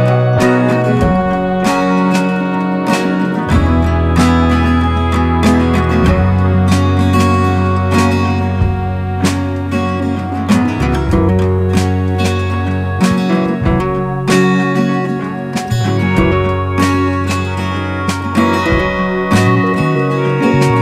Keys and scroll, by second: 5.0 super+g, 11.4 super+g, 19.8 super+g.